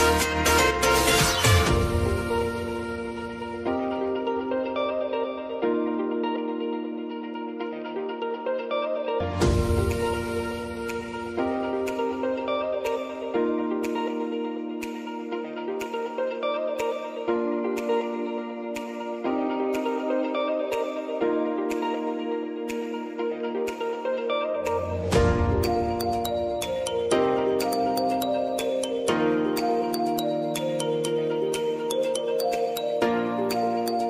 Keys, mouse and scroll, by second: 0.6 click, 2.6 Up, 4.0 click, 4.7 Right, 6.0 click, 8.3 ctrl+c, 8.5 ctrl+v, 9.5 click, 11.4 F9, 12.1 click, 13.3 F9, 14.3 alt+click, 14.9-16.0 typing, 16.2 Down, 16.6 Return, 17.9 click, 19.4 space, 24.7 space, 25.0 click, 25.3 space, 29.3 space, 29.5 click, 31.4 ctrl+y, 32.7 Return, 33.5-34.0 drag.